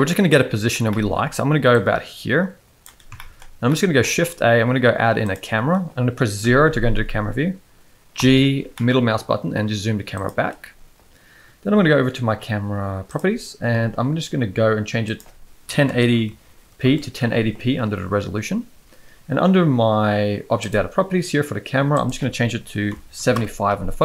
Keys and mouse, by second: 0.9 shift+middle click, 1.7-2.8 drag, 3.1 shift+middle drag, 3.7 middle click, 4.1 shift+a, 6.4 KP_0, 8.1 g, 15.0-16.8 drag, 22.0-23.3 drag.